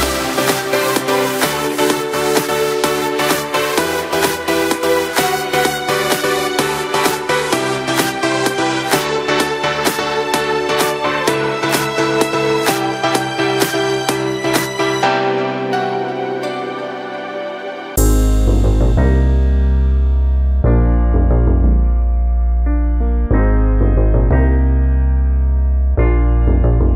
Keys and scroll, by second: 13.3 ctrl+shift+n, 13.8 Return.